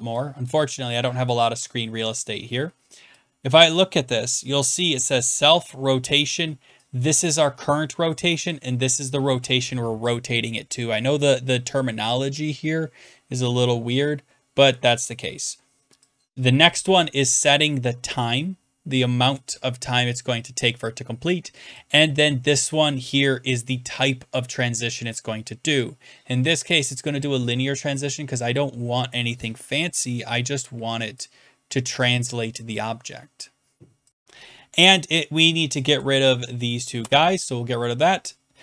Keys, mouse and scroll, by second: 0.5 click, 2.0 click, 4.9 click, 8.1 click, 8.5 click, 10.8 click, 15.4 click, 16.6 click, 19.3 click, 23.5 click, 29.9 click, 32.0 click, 36.0 click, 37.0 BackSpace.